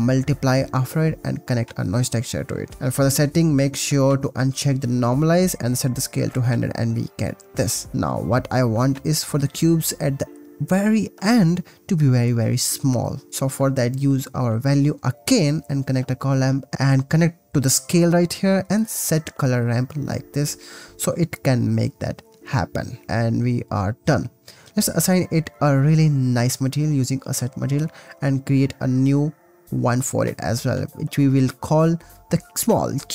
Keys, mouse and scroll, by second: 0.4-1.8 middle drag, 1.1 shift+a, 2.6-4.2 middle drag, 4.3-5.3 middle drag, 6.2 0, 7.4-8.7 middle drag, 8.8-11.2 ctrl+middle drag, 9.0 ctrl+s, 11.0 ctrl+s, 12.5 click, 13.3 click, 13.9 click, 14.2 shift+d, 14.5 click, 14.9 click, 15.6-16.3 drag, 16.5 click, 21.5 middle click, 22.2 middle click, 24.6 shift+a, 26.6-27.2 drag, 27.6 click, 28.6 click, 28.8 drag, 29.7 shift+click, 30.3 shift+l, 32.8 click.